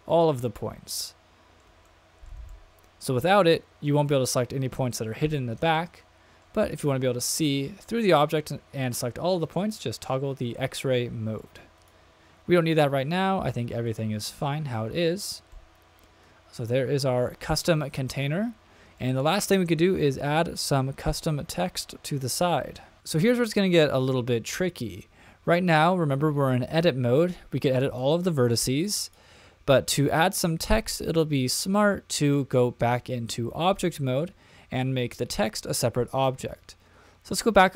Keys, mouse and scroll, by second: 1.9-2.5 shift+middle drag, 2.6 middle click, 5.8 middle click, 11.8 click, 13.8 click, 14.3 middle click, 15.0 shift+middle click, 15.5-17.5 middle drag, 17.9-18.6 shift+middle drag, 19.0-19.6 shift+middle drag, 23.0 click, 27.5-28.0 drag, 29.0 click, 30.1-30.9 scroll down 1, 31.1-31.8 shift+middle drag.